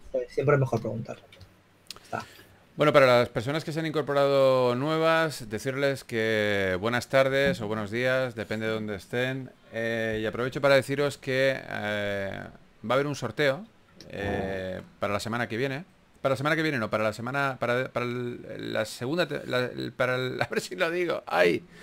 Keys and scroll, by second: 1.3 typing, 3.2-3.6 typing, 15.3 3, 16.7-17.5 typing.